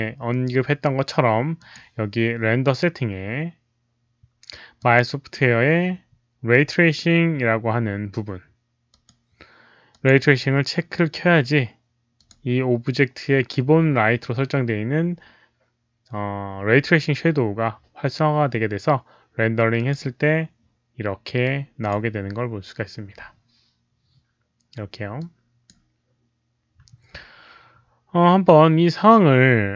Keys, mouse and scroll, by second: 1.5 click, 4.7 click, 6.8-8.8 scroll down 1, 8.8 click, 9.8 click, 12.1 click, 19.7 click, 21.4 click, 25.1 click.